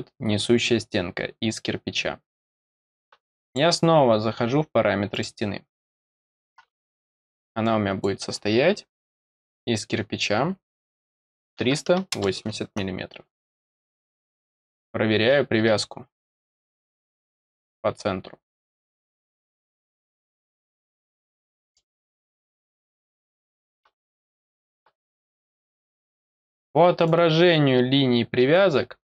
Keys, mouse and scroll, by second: 3.4 click, 5.1 click, 7.6 click, 14.3 click, 16.9 click, 17.6 click, 18.8 click, 20.4 click, 21.4 middle click, 22.5 click, 24.4 scroll up 2, 25.5 click, 26.3-27.0 scroll up 2, 27.0-29.1 drag.